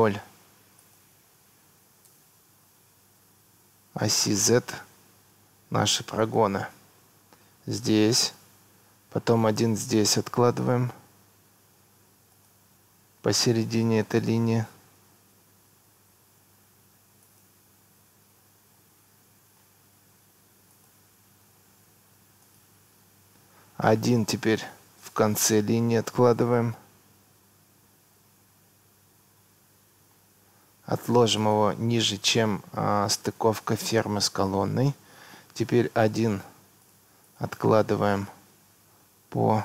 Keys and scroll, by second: 2.1 Tab, 6.8 Escape, 11.6 Escape, 21.4 Escape, 31.8 Escape, 37.8 Escape.